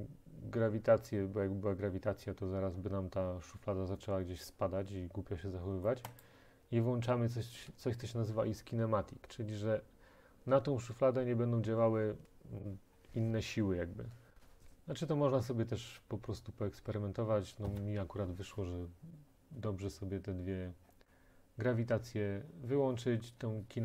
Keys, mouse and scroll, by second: 6.3 click, 8.1-11.3 drag.